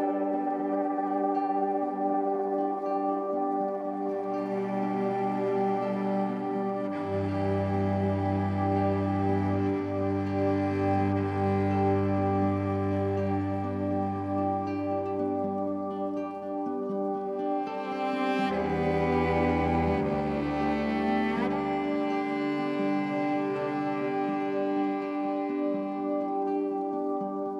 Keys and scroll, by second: 6.9 ctrl+t.